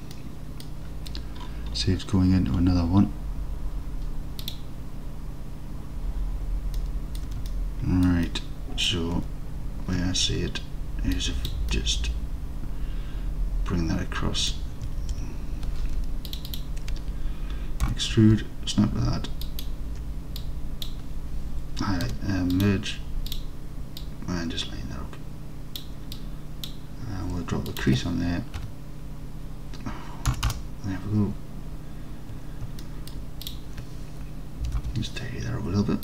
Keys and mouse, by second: 0.2 alt+click, 0.3 alt+click, 6.8 alt+click, 7.5-8.0 alt+drag, 8.0 alt+middle drag, 8.3-8.9 middle drag, 9.2 Tab, 11.3 click, 11.7-14.6 alt+middle drag, 15.1 alt+z, 16.3 shift+click, 16.5 shift+click, 17.9 e, 19.5 ctrl+click, 20.5 click, 22.1 m, 24.1-25.9 drag, 26.3 click, 27.9-31.3 drag, 32.9 alt+middle click, 34.7 g, 34.8 g.